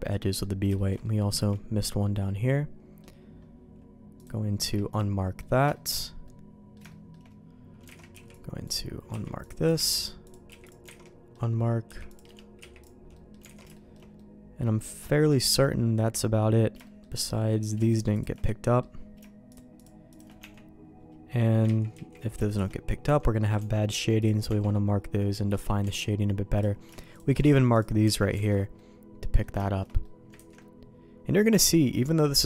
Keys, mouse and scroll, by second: 0.7 shift+middle click, 1.0 middle click, 1.9-2.9 middle drag, 4.1 click, 4.9 q, 5.3 middle click, 5.7 middle click, 6.2 middle click, 6.8 shift+middle click, 7.8 alt+a, 8.1 b, 9.0 q, 9.8 alt+a, 10.2 click, 10.4 q, 10.8 alt+a, 11.0 middle click, 11.8 c, 12.5 q, 13.1 middle click, 13.4 alt+a, 13.7 shift+middle click, 14.1-16.1 middle drag, 16.8 shift+middle click, 17.6 click, 17.8 shift+click, 18.4 middle click, 19.4 shift+click, 20.3 Tab, 21.2 middle click, 21.6 ctrl+z, 21.9 ctrl+z, 22.4 shift+click, 23.0 Tab, 23.5 Tab, 23.8 q, 24.4 Tab, 25.2 middle click, 25.8 Tab, 26.5 click, 27.1 shift+click, 27.4 q, 28.0 Tab, 28.3 alt+a, 28.7 middle click, 29.6 shift+middle click, 30.0 middle click, 30.3 ctrl+s, 30.5 middle click.